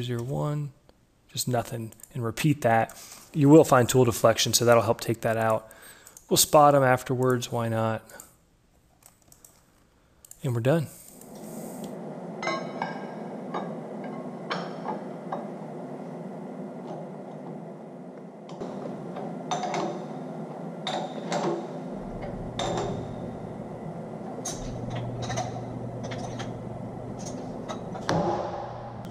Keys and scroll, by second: 0.0 1, 11.2 Delete.